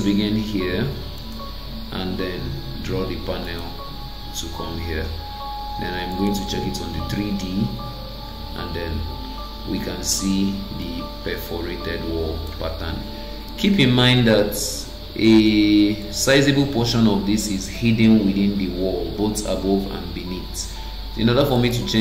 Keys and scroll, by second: 13.5 Escape.